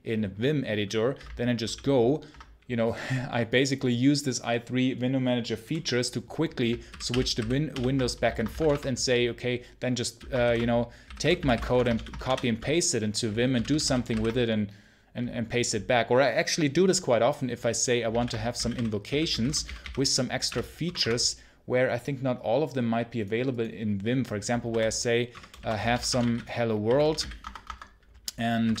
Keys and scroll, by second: 1.5 ctrl+super+l, 6.8 ctrl+super+h, 7.0 ctrl+l, 7.6 ctrl+l, 8.1 ctrl+c, 8.4 ctrl+v, 8.4 space, 8.6 Return, 10.3 ctrl+super+h, 10.7-13.4 typing, 14.0 ctrl+super+h, 18.0 ctrl+super+l, 18.2-20.3 typing, 20.7 Return, 20.9 Return, 24.5-28.8 typing.